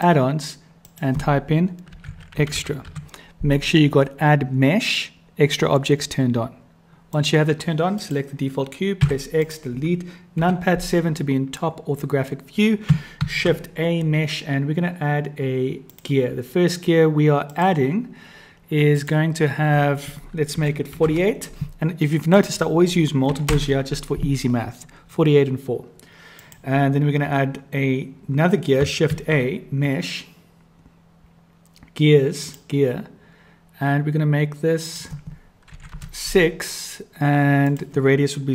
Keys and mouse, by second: 7.9 click, 9.0 x, 10.4 KP_7, 13.2 shift+a, 17.5 click, 18.9-20.0 drag, 20.6-21.9 drag, 22.3-25.0 drag, 29.0 shift+a, 34.8-36.9 drag, 37.7 click.